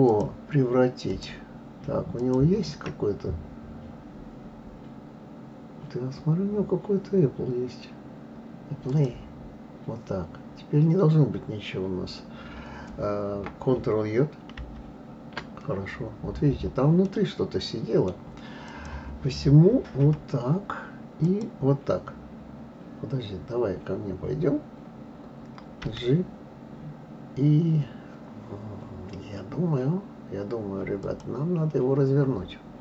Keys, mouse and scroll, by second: 0.1 shift+click, 1.1 shift+click, 2.2 shift+click, 8.9-9.9 drag, 14.6 ctrl+j, 17.0-18.7 middle drag, 18.7 click, 20.0 KP_3, 21.2 click.